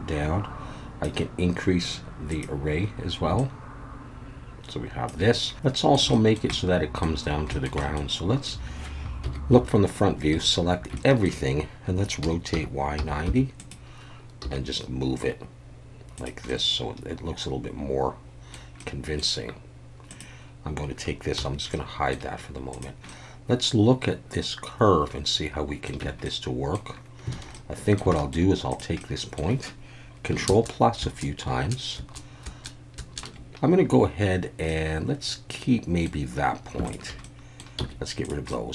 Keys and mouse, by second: 2.4 drag, 3.4-5.1 shift+drag, 5.5-5.9 middle drag, 6.2 shift+middle drag, 6.6-7.0 middle drag, 8.0 middle drag, 9.2 KP_1, 10.3 a, 10.9-11.3 shift+middle drag, 12.2 r, 12.5 y, 12.9 9, 13.2 0, 13.6 click, 14.4 g, 16.2 click, 16.6-18.5 middle drag, 18.9 middle drag, 21.4 h, 21.7-22.1 middle drag, 22.7 click, 23.1-25.9 middle drag, 26.0 Tab, 26.2 middle click, 27.3 alt+a, 27.5 middle click, 28.1 shift+middle click, 29.0 middle click, 31.0 ctrl+KP_Add, 31.5 ctrl+KP_Add, 32.0 ctrl+KP_Add, 32.5 ctrl+KP_Add, 33.0 ctrl+KP_Add, 33.5 z, 34.7-36.1 middle drag, 37.2 middle click, 37.8 x, 38.5 middle click.